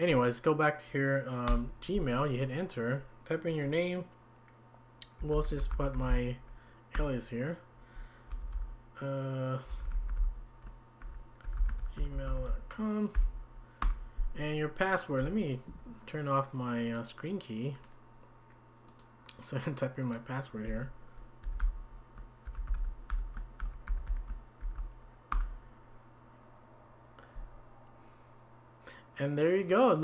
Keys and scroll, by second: 1.5 Return, 5.0-6.6 typing, 6.9 Return, 8.1-13.8 typing.